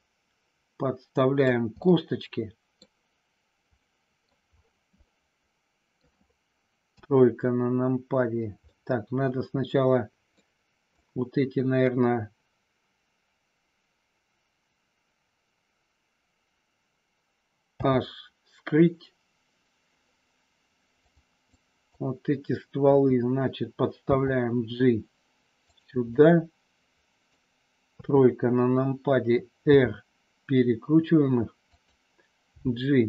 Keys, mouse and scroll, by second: 1.8-2.8 middle drag, 3.8 scroll up 1, 3.9 middle click, 5.0-6.0 middle drag, 6.8 KP_3, 8.6-10.4 middle drag, 11.0 click, 17.6 h, 21.6 click, 24.0 g, 25.6 click, 26.2-27.3 middle drag, 26.2 scroll up 1, 27.9 KP_3, 29.6 r, 31.8 click, 32.5 g.